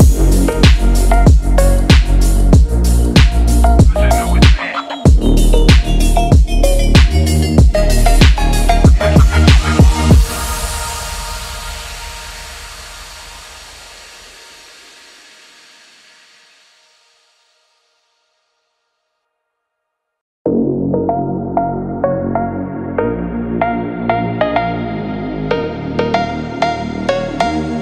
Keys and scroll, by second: 12.9 ctrl+0, 13.1 ctrl+-.